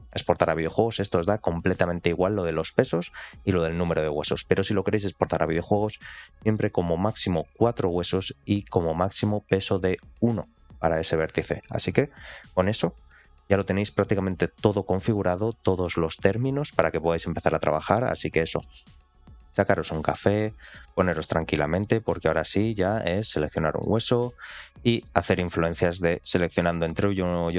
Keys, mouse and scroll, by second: 7.4 ctrl+click, 18.9-19.4 scroll down 3, 19.4 shift+middle click, 19.9 shift+middle click, 21.6 click, 22.0 shift+middle click, 23.1 ctrl+click, 23.5 shift+middle click, 24.1 middle click, 24.9 shift+middle click, 26.0 ctrl+click, 26.7 ctrl+click, 27.2 ctrl+click.